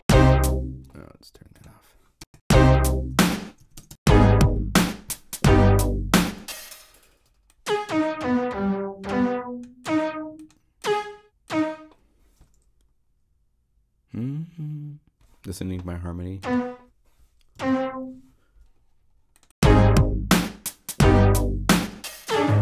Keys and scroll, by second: 0.3 0, 2.1 Home, 2.9 0, 3.5 4, 3.7 Home, 6.3 0, 17.5 alt+Up, 21.7 space.